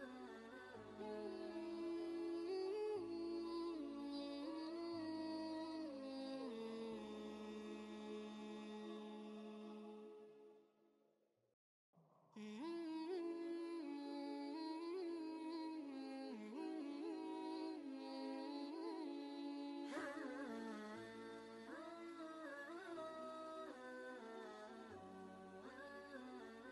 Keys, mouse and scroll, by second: 3.3-5.8 drag, 6.7 shift+Right, 8.7 Right, 10.9 click, 13.2 ctrl+space, 13.4 ctrl+click, 13.8 ctrl+space, 14.4 click, 14.8 space, 15.6 ctrl+space, 16.0 ctrl+click, 16.2 ctrl+space, 18.1 click, 20.5 click.